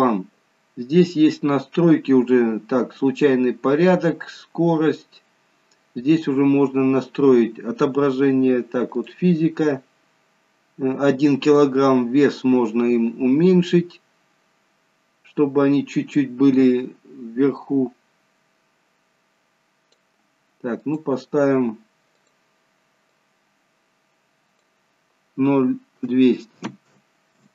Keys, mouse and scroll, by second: 4.2-6.2 scroll down 1, 6.3-6.8 scroll down 4, 9.3 click, 11.9 click, 21.1 click, 27.2 0.